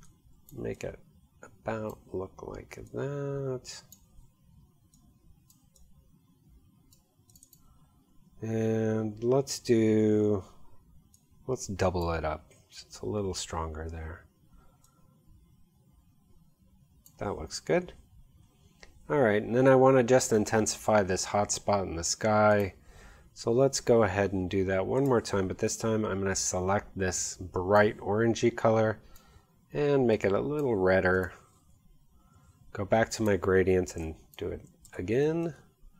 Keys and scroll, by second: 34.9 shift+v, 35.8 v.